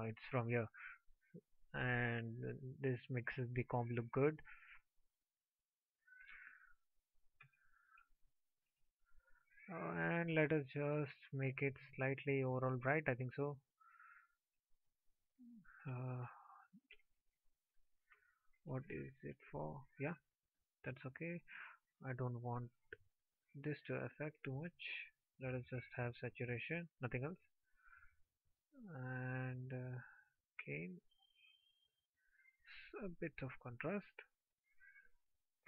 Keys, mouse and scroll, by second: 17.2 ctrl+z, 20.2 click.